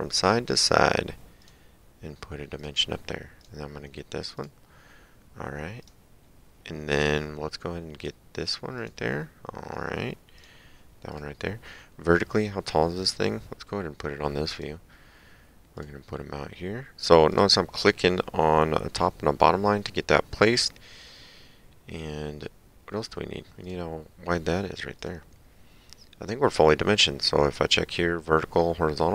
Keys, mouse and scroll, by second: 1.4 click, 2.6 click, 5.8 click, 8.0 click, 10.4 click, 14.6 click, 15.8 click, 17.3 click, 23.7 click, 25.0 click.